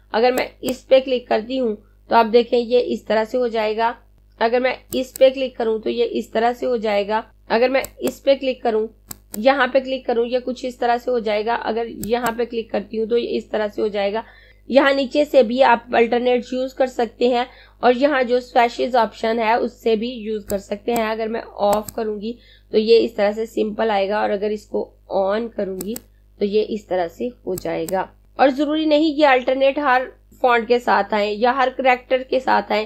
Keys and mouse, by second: 5.0 click, 7.9 click, 12.1 click, 20.5 click, 25.6 click.